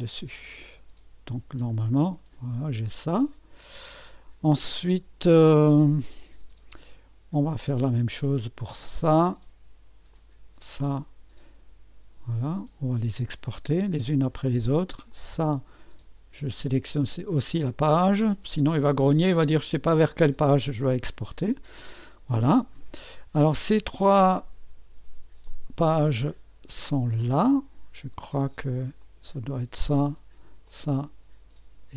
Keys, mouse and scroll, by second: 0.0-1.1 drag, 1.8-3.5 scroll down 3, 3.5-6.5 scroll down 1, 8.8-10.8 drag, 9.7 BackSpace, 12.4 click, 15.1 click, 16.1 ⌨, 17.0 click, 21.0-22.1 drag, 25.5 click, 26.0 middle click, 29.0 click, 30.5 ⌨, 30.7 click.